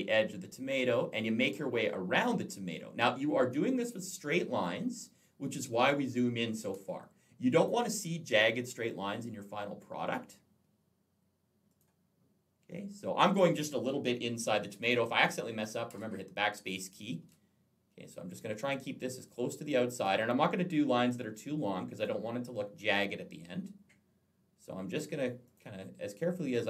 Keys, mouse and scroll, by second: 1.2 click, 3.6 click, 5.6 click, 6.6 space, 6.7 click, 11.5 click, 14.6 click, 15.7 BackSpace, 16.5 BackSpace, 19.7 click, 21.8 click, 25.3 click, 26.3 BackSpace.